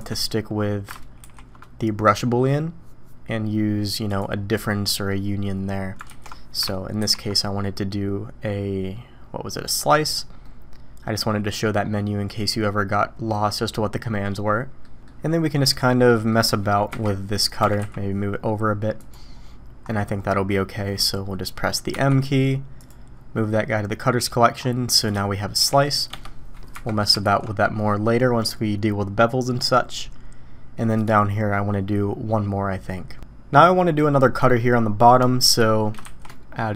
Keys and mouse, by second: 0.0 shift+click, 1.3 ctrl+shift+b, 5.0 middle click, 6.1 ctrl+z, 7.1 ctrl+shift+b, 10.5-11.6 middle drag, 14.2-14.8 middle drag, 16.1 middle click, 16.9 KP_1, 17.6 g, 21.9 m, 23.5-24.4 drag, 25.1-25.6 drag, 25.6 g, 26.7 KP_1, 27.2 alt+a, 31.0 click, 36.0 shift+a.